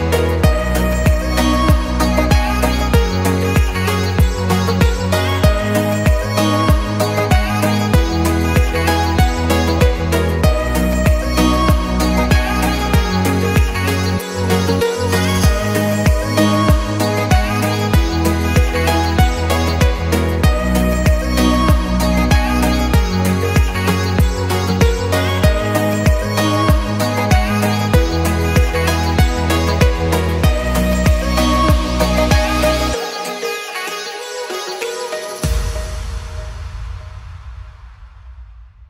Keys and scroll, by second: 0.0 w, 1.5 a, 6.7 Escape, 22.6 Escape, 25.9 m, 28.3 Escape, 31.2 m, 35.1 Escape, 36.9 Escape, 38.6 Escape.